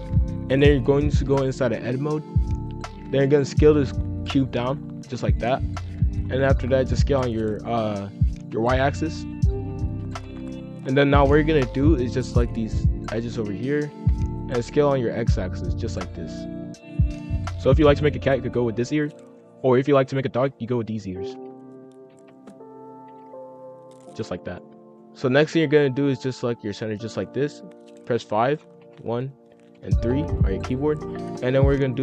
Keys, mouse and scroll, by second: 0.1 scroll down 1, 0.4 g, 2.3 click, 2.5 middle click, 2.9-3.2 scroll up 1, 3.2 s, 6.2-6.9 scroll up 4, 6.2 middle click, 6.9 s, 8.1 s, 10.0 KP_5, 10.1 KP_1, 11.1-12.2 middle drag, 12.2 click, 13.0 shift+click, 13.8 s, 17.3 F2, 21.1 ctrl+r, 22.0 s, 23.1 ctrl+b, 24.4 middle click, 25.1 F2, 26.4 alt+click, 28.0 KP_5, 28.8 KP_1, 29.7 KP_3.